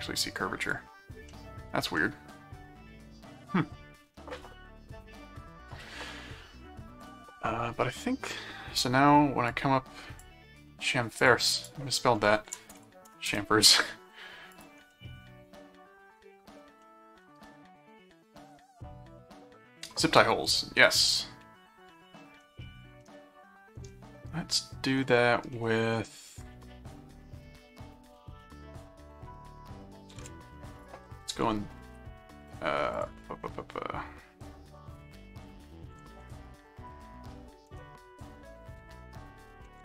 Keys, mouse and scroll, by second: 0.6 click, 1.3 middle click, 1.9-4.1 middle drag, 7.0 click, 9.5 click, 11.2 click, 12.7 BackSpace, 12.7 s, 13.2 Return, 14.5 click, 14.9-16.2 middle drag, 16.8 middle click, 21.2-22.4 middle drag, 23.0-24.8 middle drag, 26.5-30.0 middle drag, 30.8 ctrl+click, 31.1 s, 32.9 click, 34.9 click, 35.2-37.4 typing, 37.8 Return, 39.6 ctrl+1.